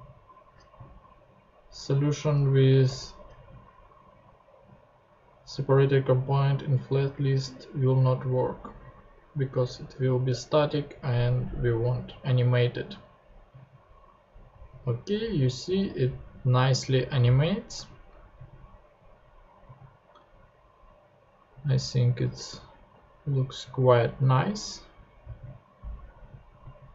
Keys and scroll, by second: 10.3 super+Tab.